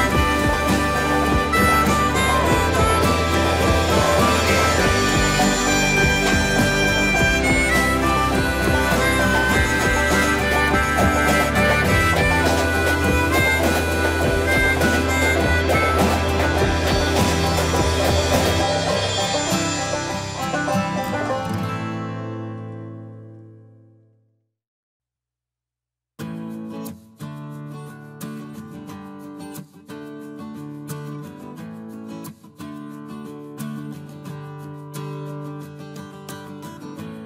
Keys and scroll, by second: 1.7 shift+space, 1.8 Escape, 3.3 t, 8.8 shift+Escape, 9.1 space, 10.7 shift+t, 14.6-16.5 typing, 16.8 Return, 18.5 ctrl+space, 19.1 e, 20.2 t, 24.3-27.2 typing, 27.3 Return, 29.2 ctrl+space, 29.2 Escape, 32.4 t.